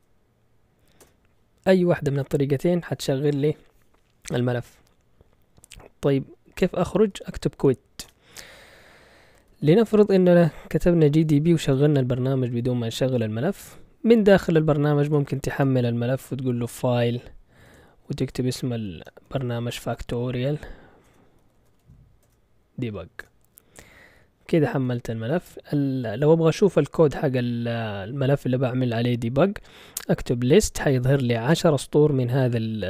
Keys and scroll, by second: 1.0 Return, 6.7-7.7 typing, 8.0 Return, 9.5 ctrl+l, 10.8-11.7 typing, 14.9-22.3 typing, 23.2 Return, 24.8 ctrl+l, 29.8-32.0 typing, 31.5 Return.